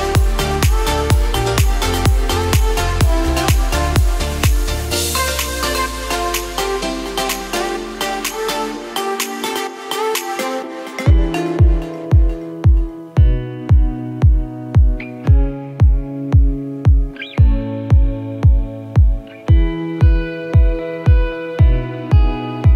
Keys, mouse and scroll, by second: 0.1 click, 0.9-1.7 scroll up 7, 2.2 alt+click, 5.5 e, 8.5 s, 12.4 ctrl+r, 17.9 ctrl+b.